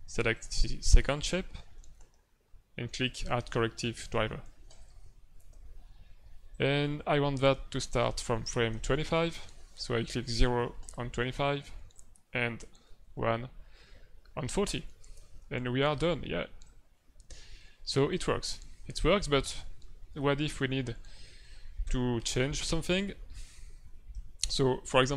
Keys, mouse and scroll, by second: 0.3 click, 4.6 click, 6.5 click, 9.0 Left, 9.4 Left, 10.8 click, 11.9 click, 12.8 Right, 14.6 click, 16.6 click.